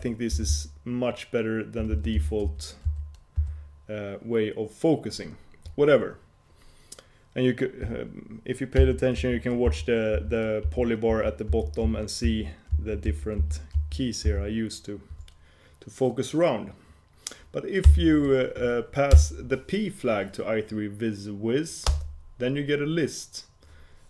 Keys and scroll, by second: 0.0 shift+super+h, 2.1 shift+super+j, 2.6 shift+super+h, 3.0 shift+super+j, 3.5 shift+super+k, 8.9 shift+super+j, 9.5 shift+super+l, 9.8 shift+super+k, 10.2 shift+super+h, 10.8 shift+super+j, 11.2 shift+super+l, 11.6 shift+super+k, 12.0 shift+super+h, 12.4 shift+super+j, 12.8 shift+super+k, 13.2 shift+super+j, 14.4 shift+super+k.